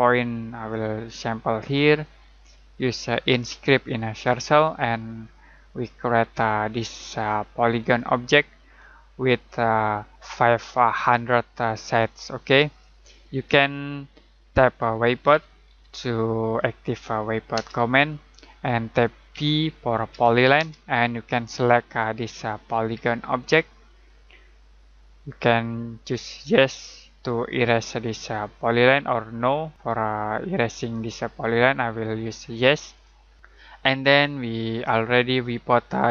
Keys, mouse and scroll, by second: 1.6 click, 4.2 click, 7.7 click, 14.5-16.1 typing, 17.5 space, 19.3 p, 20.5 space, 23.4 click, 32.9 click, 33.3 Escape.